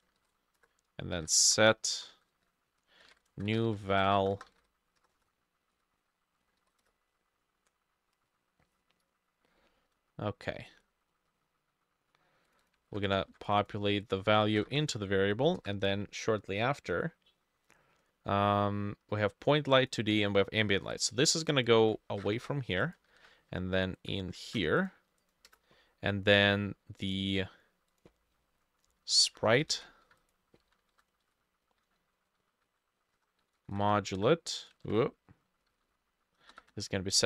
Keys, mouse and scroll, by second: 0.0-7.0 typing, 0.1 shift+middle click, 0.6 Return, 1.7 shift+middle click, 2.7 Left, 3.3 middle click, 6.0 Right, 6.8 shift+Return, 12.7 double click, 12.9 ctrl+c, 13.6 ctrl+v, 13.6 c, 13.6 double click, 14.5 space, 14.7 =, 14.9 ctrl+v, 15.7 Return, 17.9-18.3 scroll down 2, 21.8 ctrl+x, 21.9-22.4 typing, 23.1 ctrl+v, 24.1 shift+middle click, 24.4 shift+Tab, 25.3 double click, 25.5 Return, 29.3 F2, 29.7 ctrl+c, 30.0-31.7 typing, 30.1 Escape, 30.1 ctrl+c, 31.3 ctrl+v, 32.7-34.4 typing, 34.8 ctrl+middle click, 34.9 ctrl+z, 35.4-37.0 typing.